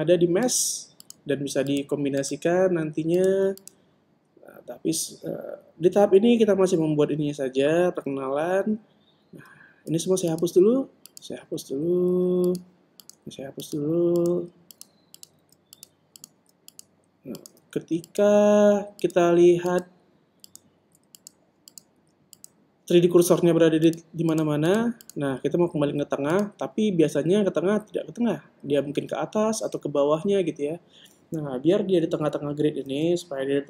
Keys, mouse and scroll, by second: 0.0-6.3 right drag, 10.7 x, 11.9-13.5 right drag, 12.1 x, 13.0 x, 13.5 click, 13.6 right click, 13.7 click, 13.9-24.4 right drag, 14.1 x, 15.2 x, 16.2 x, 17.2 x, 18.5 x, 20.1 x, 21.6 x, 22.8 x, 24.7-28.3 drag, 28.8 click.